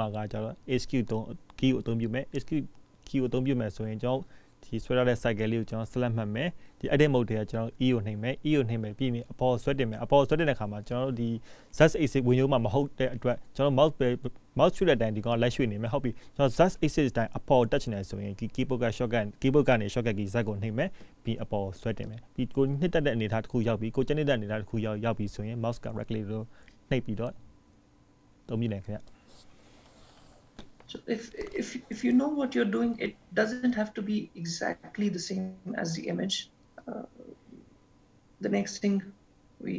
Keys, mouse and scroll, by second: 17.9-18.5 scroll up 2, 18.5 scroll up 1, 18.8 shift+middle click, 24.8 shift+middle click.